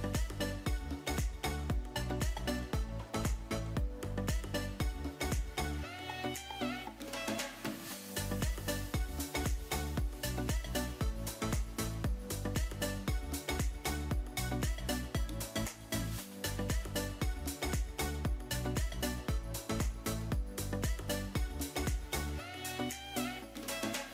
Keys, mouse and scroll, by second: 0.0 KP_Decimal, 0.9 middle click, 3.3-5.1 drag, 6.3 right click, 8.5 click, 10.2 KP_Decimal, 11.3-11.9 middle drag, 13.5 middle click, 14.8-16.1 drag, 17.2-17.5 middle drag, 18.9-19.5 middle drag, 20.1 middle click, 20.8-22.6 drag.